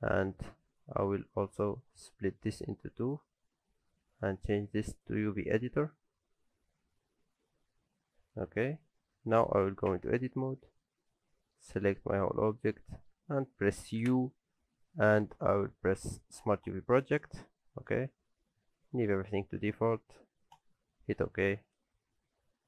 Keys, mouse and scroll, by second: 2.1 click, 5.5 scroll up 1, 7.1-8.6 scroll up 1, 9.6 click, 9.9 Tab, 10.5 a, 10.8 middle click, 11.8 shift+middle click, 11.8 shift+scroll up 1, 12.1 middle click, 12.8 shift+middle click, 14.0 u.